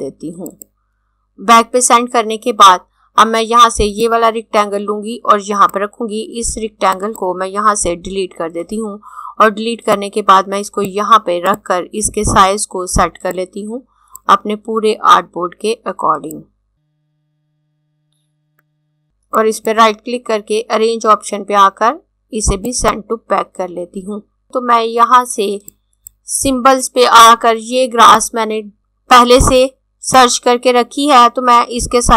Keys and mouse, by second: 0.2 click, 3.8 click, 7.8 Delete, 9.6 click, 19.4 right click, 22.6 click, 25.8 click.